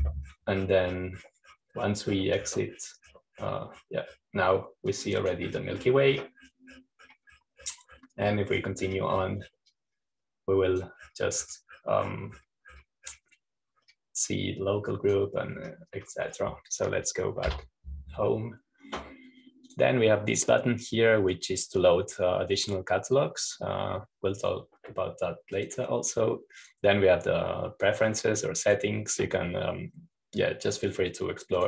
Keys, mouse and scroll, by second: 0.0-5.5 drag, 7.0-8.1 drag, 11.5-13.8 drag, 13.4-13.8 scroll down 1, 16.2 click, 17.2-19.2 scroll up 1, 19.4 Home, 21.2 click, 24.1 click, 27.1 click, 28.1-29.2 drag, 29.6-31.6 drag.